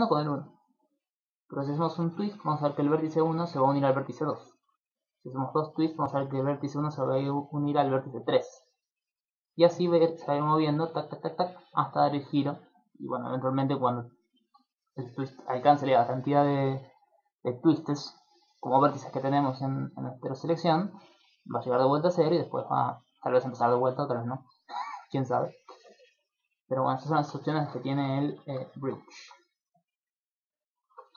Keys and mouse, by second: 0.7 click, 1.9 middle click, 2.1 ctrl+middle click, 5.2 click, 9.4 click, 9.6 click, 9.8 click, 10.0 click, 10.2 click, 10.4 click, 10.6 click, 10.8 click, 11.0 click, 11.2 click, 11.4 click, 11.6 click, 14.6 click, 14.8 click, 21.6 click, 22.0 click, 22.2 click, 26.1 click, 26.4 click, 27.5 shift+middle click, 27.8 ctrl+middle click, 28.2 middle click, 28.4 ctrl+middle click, 28.7 shift+middle click, 29.0 ctrl+middle click, 30.2 click, 30.8 Tab.